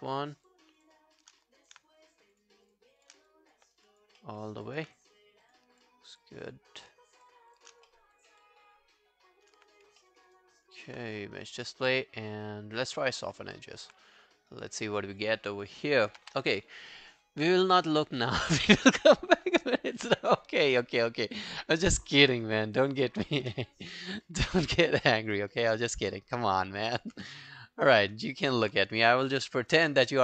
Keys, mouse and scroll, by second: 0.1 shift+click, 0.5 shift+click, 1.5 alt+click, 2.4 shift+click, 2.7 shift+click, 3.3 alt+click, 3.7 alt+right click, 3.9 alt+click, 4.2 alt+middle click, 4.4 alt+right click, 4.7 alt+click, 5.5 shift+click, 5.8-7.5 shift+click, 7.9 alt+middle click, 8.2 alt+scroll down 1, 8.4 alt+click, 10.0 alt+middle click, 10.2 alt+right click, 13.3 double click, 13.6 alt+middle click, 14.1 right click, 15.2 double click, 15.4 scroll down 2, 15.7 alt+click, 15.9 alt+right click, 16.2 q, 24.2 alt+middle click, 24.5 alt+click, 25.1 alt+middle click, 25.4 alt+right click, 25.6 alt+click, 25.9 alt+middle click, 26.2 alt+right click, 26.5 alt+middle click, 26.7 alt+right click, 26.9 alt+click, 27.2 q, 27.9 alt+click, 27.9 alt+middle click, 28.2 alt+right click, 28.4 alt+click.